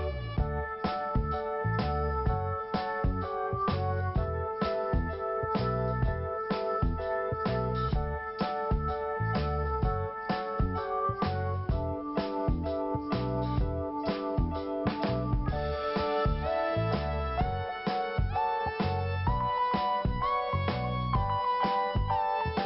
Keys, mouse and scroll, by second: 0.2 click, 2.0 click, 3.5 click, 4.4 click, 6.8 click, 7.9 click, 10.7 click, 11.7 click, 14.2 click, 14.6 click, 17.3 click, 18.0 click, 22.5 scroll up 1.